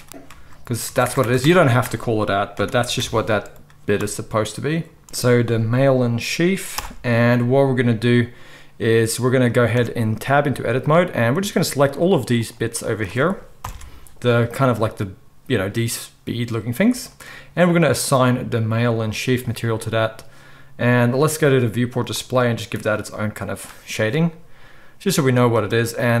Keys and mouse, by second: 1.0 BackSpace, 1.2 BackSpace, 10.1 Tab, 11.0-12.0 middle drag, 12.0 shift+click, 12.1 shift+middle click, 12.3 shift+click, 12.5-18.0 shift+middle drag, 13.7 ctrl+l, 18.0-22.0 drag, 22.0-26.2 middle drag.